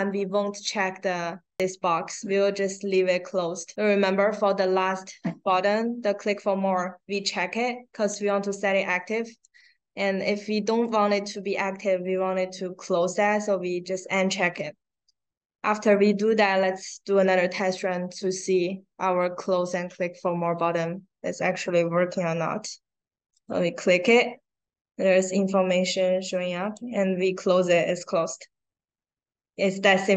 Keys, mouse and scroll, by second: 2.7 click, 5.1 click, 5.8 scroll down 1, 10.7 click, 16.5 click, 23.2 click, 26.6 click.